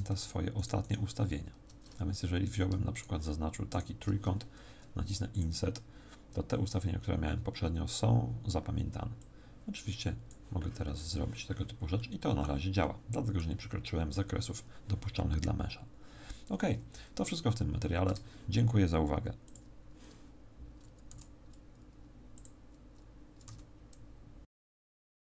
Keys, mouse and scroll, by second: 0.1 shift+right click, 1.0 shift+right click, 2.4 right click, 2.9 right click, 3.7 shift+right click, 5.3 click, 9.1 click, 11.9 middle click, 12.8 middle click, 16.1-17.7 scroll down 1, 17.7 scroll down 3, 18.0 Tab, 21.1 q.